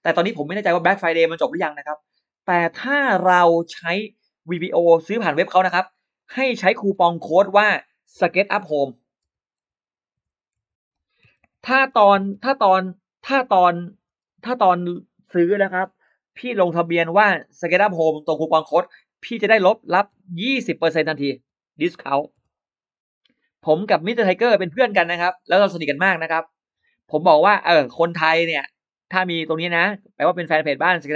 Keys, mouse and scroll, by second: 4.6 space, 6.0 click, 6.5 shift+x, 6.7 shift+x, 8.0 s, 9.1-15.5 typing, 10.4 Caps_Lock, 16.7 click, 17.5 click, 18.4 click, 19.9 1, 21.0-22.3 typing, 23.2 click, 23.8-26.6 drag, 27.4-28.9 drag, 29.5-31.1 drag.